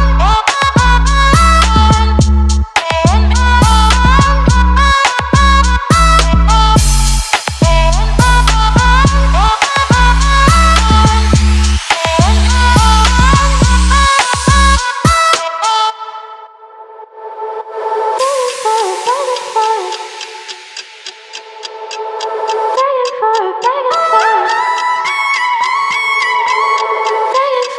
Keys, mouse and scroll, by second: 19.5 right click, 20.5 click.